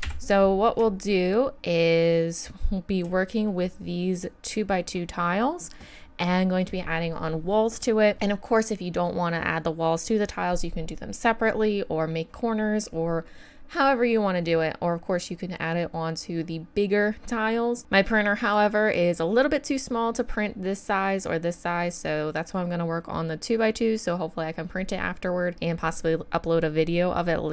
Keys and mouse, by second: 0.0 KP_1, 14.4 middle click, 15.4-16.4 middle drag.